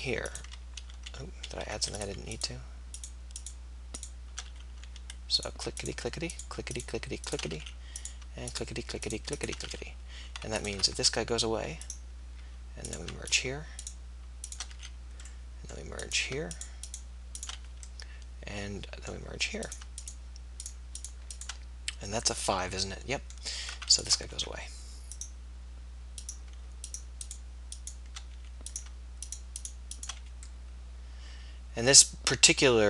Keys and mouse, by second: 0.9 ctrl+z, 1.1 ctrl+z, 1.5 ctrl+z, 4.7 f, 8.0 f, 9.8 f, 11.1 x, 14.9 f, 17.8 f, 19.1-21.4 middle drag, 24.4 x, 28.4 f, 30.3 f.